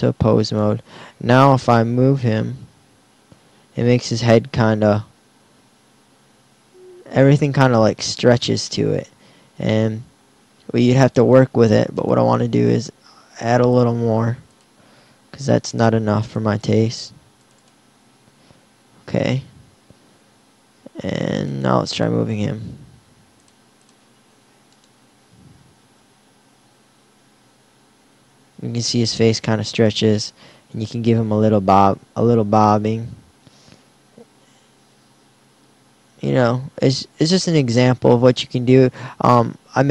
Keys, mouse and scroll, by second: 1.6 g, 12.1-13.5 drag, 26.0 r, 30.5 g.